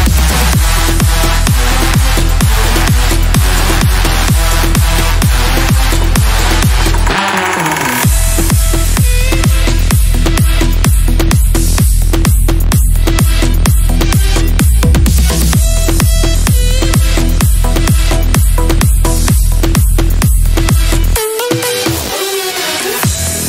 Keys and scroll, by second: 6.7 ctrl+Page_Down.